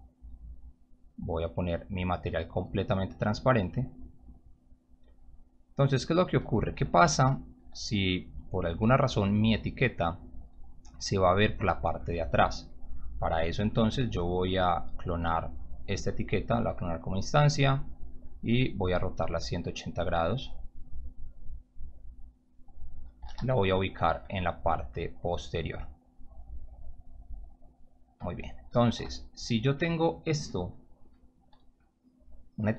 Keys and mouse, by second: 0.0 right click, 0.3 click, 1.2-1.6 drag, 2.0 click, 3.1 click, 3.8 click, 4.5 click, 5.9 click, 7.0 p, 13.7 e, 14.5 w, 15.4 shift+click, 17.3 click, 17.7 e, 19.0-22.5 drag, 22.7-23.8 typing, 24.6 click, 26.4-28.0 drag, 28.6-29.4 typing.